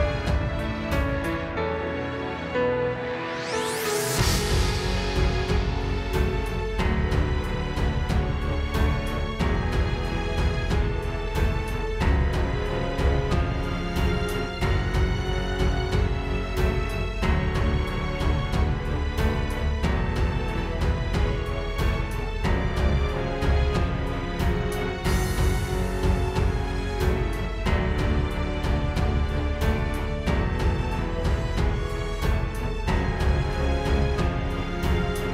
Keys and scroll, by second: 21.7 super+j, 25.3 super+z, 27.2 space, 27.6 space, 28.3 super+z, 28.9 super+j, 32.2 space.